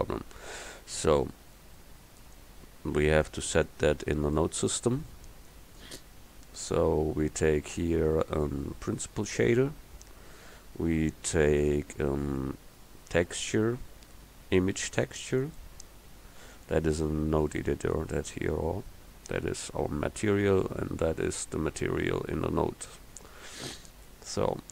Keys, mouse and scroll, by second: 2.4 click, 3.7 click, 7.8-10.1 drag, 11.7-14.1 drag, 23.4 click, 23.7 middle click, 23.8 click.